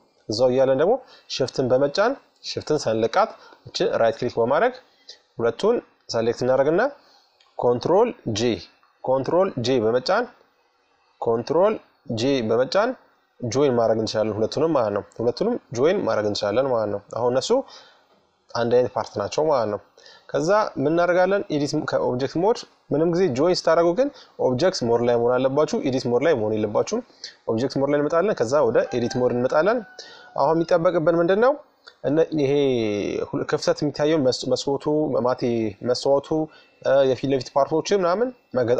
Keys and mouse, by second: 2.1-3.7 right drag, 3.7 middle click, 9.5-11.3 drag, 10.7 ctrl+j, 12.4 middle click, 15.8-18.7 drag, 19.4-21.0 middle drag, 21.0-22.7 drag, 25.7-26.9 drag, 29.2-35.3 middle drag, 37.3-38.7 middle drag.